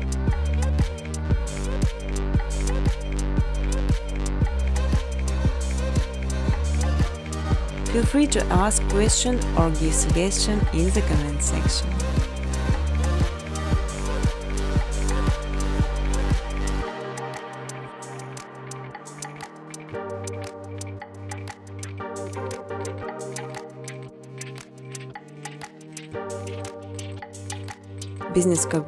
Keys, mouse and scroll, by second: 0.3 middle click, 0.3 space, 1.3 space, 1.7 space, 2.4 space, 3.2 middle click, 3.3 middle click, 4.1 middle click, 5.2 click, 5.9-7.0 typing, 8.2 click, 10.8 space, 11.3 space, 11.6 middle click, 13.3 click, 15.3 click, 24.5 click, 24.8 space, 26.1 space, 26.5 space, 27.4 space, 27.8-28.4 scroll, 28.4-28.8 scroll.